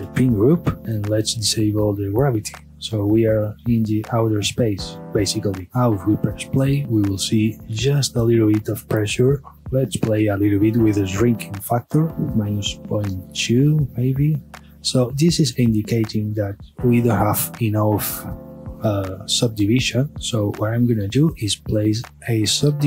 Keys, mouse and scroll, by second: 0.8 scroll down 1, 1.5-3.4 drag, 3.4-5.7 middle drag, 5.7 space.